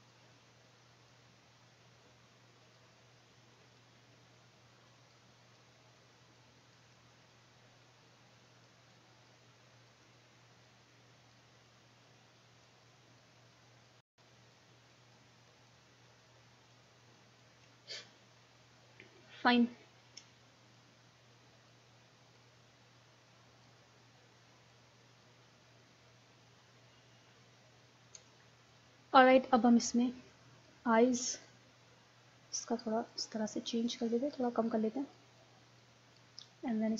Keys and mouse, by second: 3.8-5.6 drag, 7.0 middle click, 7.1 click, 7.6 click, 8.6-12.9 drag, 14.6-18.9 drag, 18.9 middle click, 20.8-24.2 drag, 24.2 middle click, 24.7-27.3 drag, 29.4 right click, 30.7-36.9 drag.